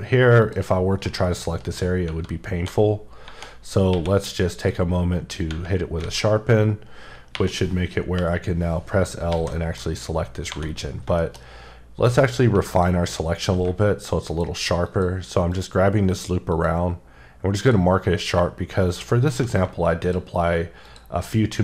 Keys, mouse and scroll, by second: 0.4 click, 2.5-3.9 typing, 4.5 click, 6.0 alt+a, 6.6 scroll up 2, 7.3 3, 8.2 l, 8.6-9.0 scroll down 3, 9.3 alt+a, 9.5 middle click, 9.8-10.2 scroll up 5, 10.5 2, 10.9-11.5 scroll up 3, 11.2 middle click, 12.2 click, 13.2 scroll down 3, 14.3 alt+shift+click, 14.9 alt+shift+double click, 15.5 alt+shift+click, 16.5 alt+shift+click, 17.6 alt+shift+double click, 18.8 alt+shift+click, 20.0 alt+click.